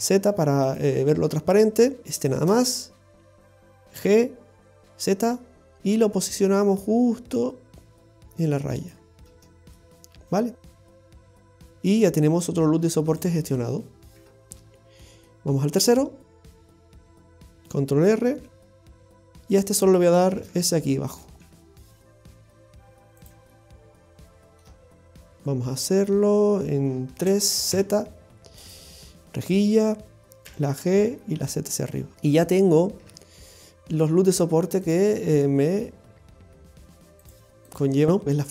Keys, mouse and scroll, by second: 0.0 z, 2.0 alt+shift+right click, 2.2 right click, 4.0 g, 9.3 middle click, 9.9-11.1 scroll down 5, 10.4 middle click, 11.1 Tab, 11.5 scroll up 1, 11.7 scroll down 1, 11.9-13.1 scroll up 1, 13.1 click, 13.5-14.2 scroll up 1, 14.2 Tab, 15.1 middle click, 16.0 middle click, 16.6 shift+middle click, 16.8 shift+middle click, 17.1 scroll up 2, 18.3 ctrl+r, 20.4 shift+s, 21.5 s, 23.5 middle click, 27.2 KP_3, 27.7 z, 32.1 middle click, 32.1 scroll down 2, 33.1 Tab, 33.4-34.3 scroll down 1, 34.3-34.6 scroll down 1, 35.4 click, 36.3 scroll down 1, 37.3 click, 37.7 click.